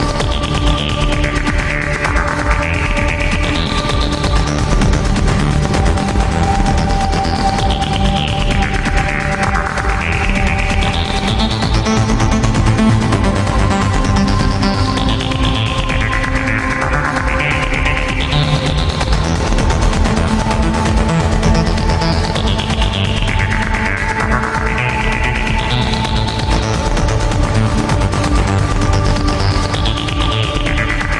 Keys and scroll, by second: 6.9 ctrl+z, 17.4 ctrl+z, 24.4 ctrl+z.